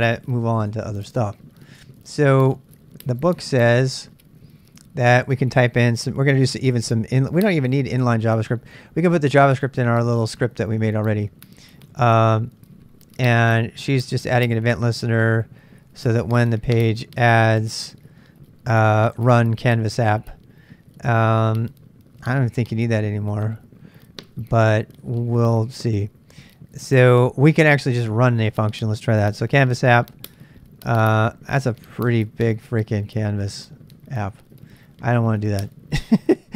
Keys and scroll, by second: 0.1-0.9 typing, 1.0-3.7 super+Tab.